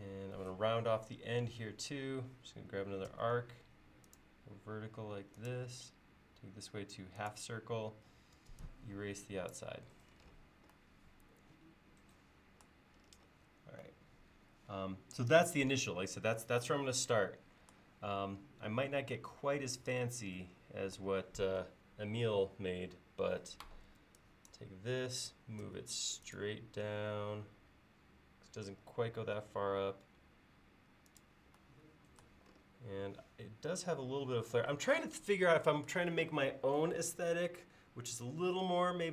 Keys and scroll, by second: 3.1 a, 8.4 e, 23.9 space, 25.7 m.